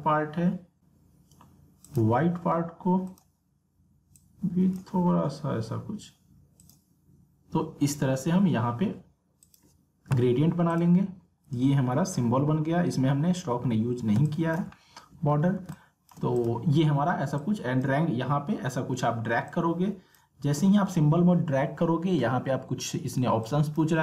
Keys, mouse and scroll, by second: 0.8 click, 1.8-6.6 drag, 9.4 click, 11.6-12.1 alt+scroll up 1, 12.1 alt+scroll, 12.2 alt+scroll down 1, 12.6-12.9 alt+scroll up 1, 13.8 alt+scroll down 1, 14.2 space, 14.2 click, 14.7 alt+scroll down 1, 15.4 alt+scroll up 1, 15.7 space, 23.4-24.0 drag.